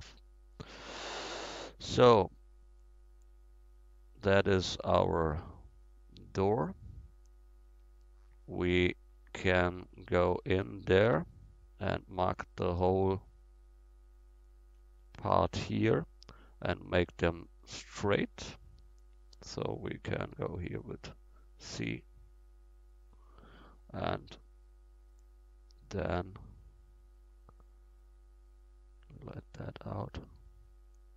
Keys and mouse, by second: 1.9-4.7 drag, 5.9 middle drag, 7.5-7.8 middle drag, 8.3 middle click, 9.0 middle drag, 10.0 Tab, 10.4 Tab, 10.8-13.2 drag, 11.1 Tab, 15.3-20.3 right drag, 20.3 c, 23.4 click, 23.8-26.8 middle drag, 29.8-31.1 right drag.